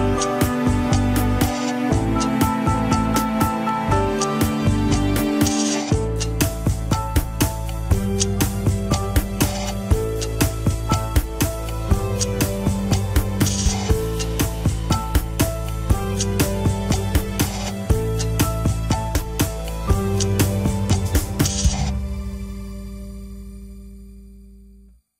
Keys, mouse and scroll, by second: 0.4 a, 1.5 x, 2.0 alt+z, 2.1 scroll down 2, 2.3-3.8 middle drag, 3.8 Tab, 4.0 scroll down 2, 4.1 KP_1, 4.5 shift+middle click, 5.2 ctrl+s, 5.5 click, 5.7 KP_3, 5.8-6.3 scroll up 6, 6.0 shift+middle click, 6.3 Tab, 7.1 s, 8.5 s, 9.9 KP_1, 10.2 s, 11.7 s, 13.9 KP_3, 14.5 r, 16.9 KP_1, 17.1 scroll up 3, 17.4 Tab, 17.7 click, 18.0 Tab, 18.3 s, 19.1 KP_3, 19.5 r, 20.7 KP_1, 21.1 Tab, 22.0-22.3 scroll up 1, 22.3 shift+middle click, 22.6 Tab, 23.0 click, 23.8 click.